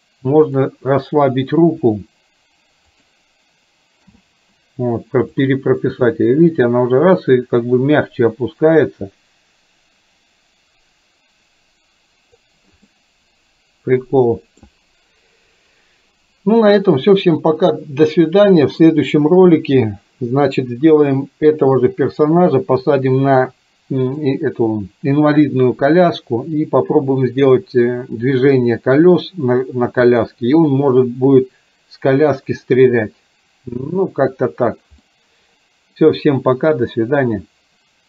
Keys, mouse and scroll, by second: 0.6 drag, 1.7 r, 4.2 i, 5.4-12.4 drag, 12.9-14.7 middle drag, 35.1-36.1 middle drag.